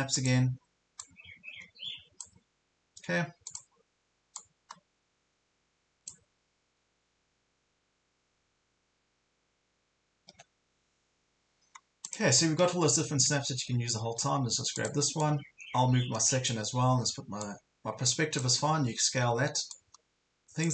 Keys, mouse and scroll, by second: 12.8 shift+scroll down 1, 13.5 ctrl+scroll down 1, 14.0 ctrl+scroll down 1, 14.8-18.6 drag, 18.6 ctrl+scroll down 1, 19.2 ctrl+scroll up 1, 19.7 click.